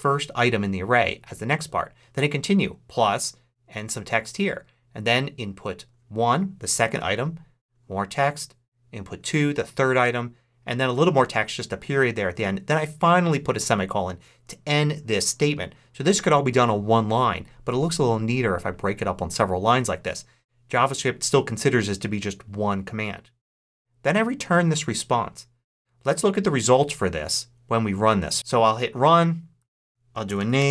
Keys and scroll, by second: 29.9-30.7 typing.